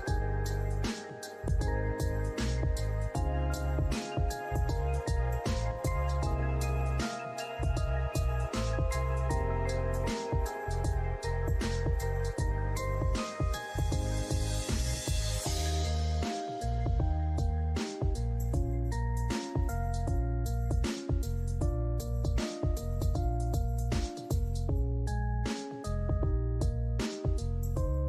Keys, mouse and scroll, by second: 1.1 alt+click, 3.0 shift+right click, 6.7 scroll up 1, 6.9 scroll down 1, 7.2 alt+middle click, 8.3 scroll up 1, 9.4 double click, 12.2 click, 12.3 alt+middle click, 12.3 alt+scroll up 1, 12.4 alt+middle click, 13.3 scroll down 1, 13.3 alt+middle click, 16.0 alt+middle click, 17.4 alt+middle click, 18.0-18.8 scroll down 1, 20.3 alt+middle click, 20.7 alt+middle click, 21.4 alt+click, 22.0 scroll down 1, 23.3 alt+click, 24.2 alt+scroll down 1, 25.2 alt+middle click, 27.5 alt+click.